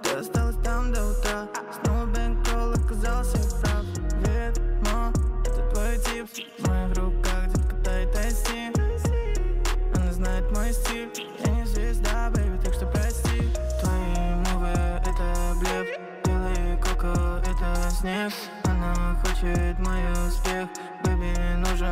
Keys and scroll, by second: 5.7 ctrl+z, 13.4-14.2 typing, 15.6-18.6 typing.